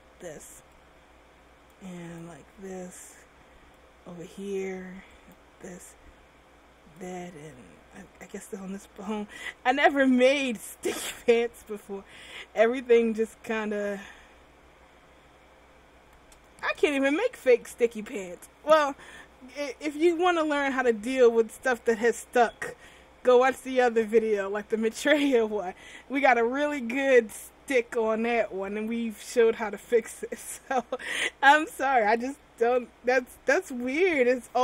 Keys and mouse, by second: 2.6-5.4 drag, 5.4 middle click, 12.6-17.0 right drag.